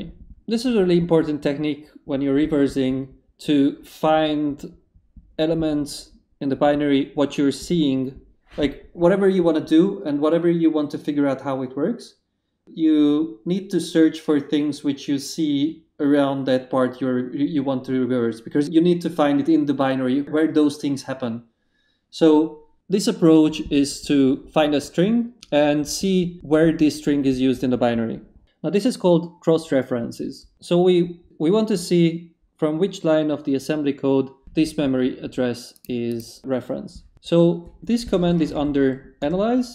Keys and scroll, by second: 38.2 a, 38.5 shift+/, 39.2 shift+Return.